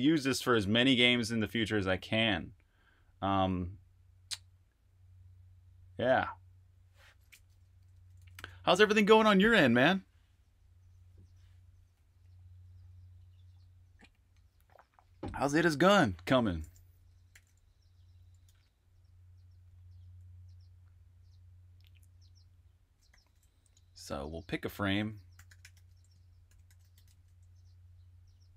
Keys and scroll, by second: 7.4-8.8 typing, 17.0 typing, 18.4-20.0 typing, 22.1-23.0 typing, 25.1-27.8 typing.